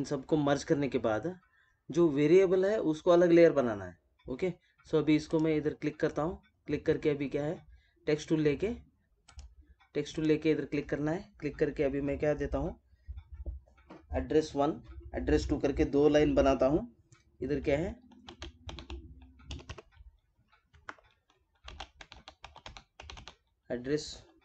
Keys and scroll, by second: 5.2 space.